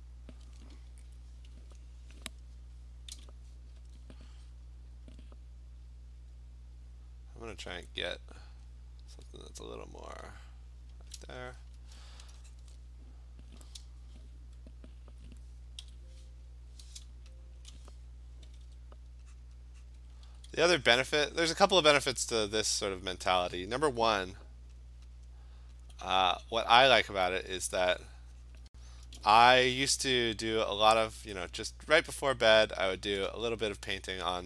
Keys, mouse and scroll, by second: 1.6 m, 3.2 b, 5.0 click, 6.4 click, 7.9 click, 8.7 click, 9.5 click, 10.0 click, 11.2 click, 11.6 Return, 12.6 click, 15.9 x, 17.6 click, 18.5 ], 18.7 ], 19.5 click, 20.0 click, 20.3 [, 20.6 [, 21.0 click, 21.6 click, 22.6 click, 24.8 alt+click, 25.0 alt+click, 25.3 click, 25.5 alt+click, 25.9 click, 27.1 click, 27.7 alt+click, 28.6 click, 29.1-30.0 typing, 30.4 click, 30.8 click, 31.4 [, 32.3 click, 32.6 click, 33.0 [, 33.2 [.